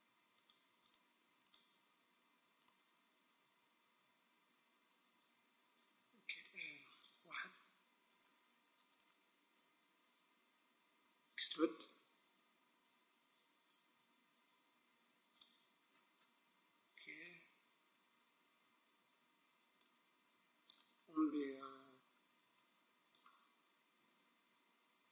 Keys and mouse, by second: 6.9 KP_1, 8.1-10.0 middle drag, 10.9 e, 15.3-16.8 drag, 15.8-16.8 middle drag, 16.8 right click, 16.9 click, 17.0 right click, 17.2 middle click, 22.0 KP_1, 23.8 z.